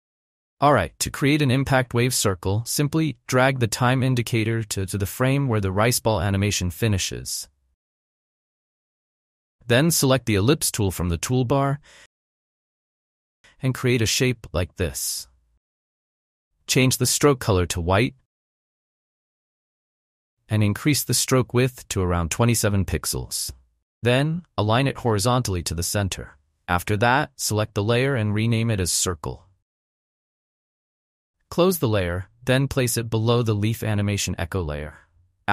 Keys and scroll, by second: 0.5 u, 28.3 Return, 28.7-30.0 typing.